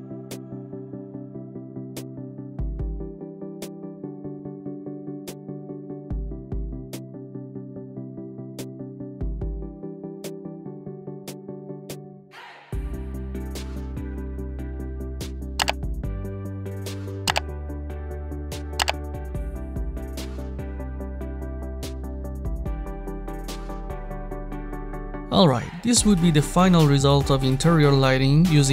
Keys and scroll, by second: 18.4 1, 18.7 0, 18.9 Return.